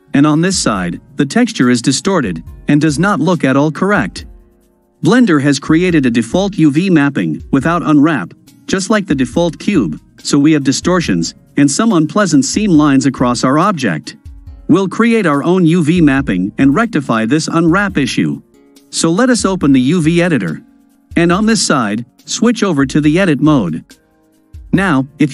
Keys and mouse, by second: 4.0-8.1 middle drag, 8.6-9.9 drag, 11.5-13.9 drag, 15.7-17.4 drag, 19.1-20.0 drag, 22.0-23.4 drag.